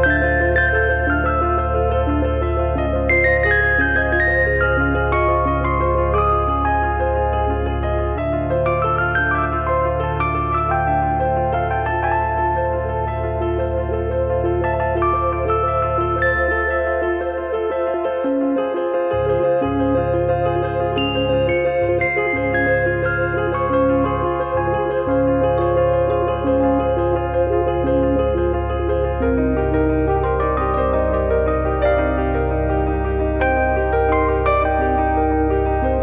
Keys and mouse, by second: 0.5 KP_3, 1.0 click, 2.6 click, 3.2 click, 3.9 click, 4.5 click, 5.1 click, 5.6 click, 6.6 click, 8.0 click, 8.2 shift+middle click, 8.6 click, 9.0 e, 9.5 click, 10.2 click, 10.8 middle click, 11.3 click, 11.5 click, 12.2 click, 13.2 click, 14.6 middle click, 15.2 KP_1, 16.6 click, 17.4 click, 18.2 e, 19.0 click, 19.4 click, 20.5 KP_3, 22.0 click, 22.8 middle click, 25.6 middle click, 26.7 shift+f, 27.0 middle click, 27.9 click, 28.8 click, 29.2 e, 30.5 click, 31.5 click, 32.0 click, 33.9 click.